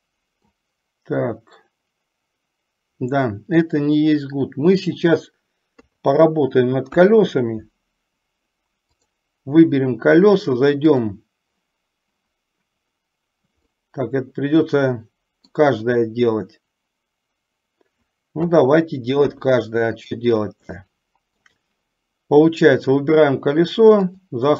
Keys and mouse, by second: 4.0-5.3 middle drag, 6.0 KP_3, 7.2 KP_1, 9.2 click, 11.2 click, 13.9-15.8 middle drag, 18.6 KP_3, 19.5 KP_1, 21.0-21.6 shift+middle drag, 24.2-24.5 drag.